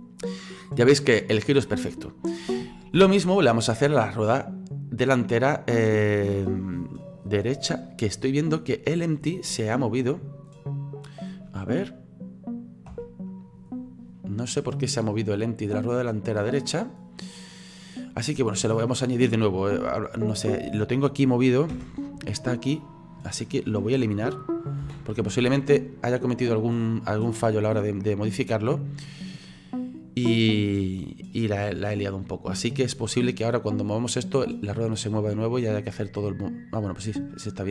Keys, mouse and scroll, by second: 3.0 ctrl+z, 3.3-7.0 middle drag, 7.0-7.8 scroll up 1, 7.8-8.8 middle drag, 8.8 scroll down 2, 9.3-10.9 middle drag, 10.9 right click, 12.9 /, 13.8-14.7 scroll down 8, 14.7 scroll up 4, 15.0-20.0 middle drag, 21.7 /, 22.8 right click, 24.8 Delete, 26.1-28.5 middle drag, 28.5 right click, 33.0-33.9 scroll down 3, 33.9 right click, 35.1-37.7 drag.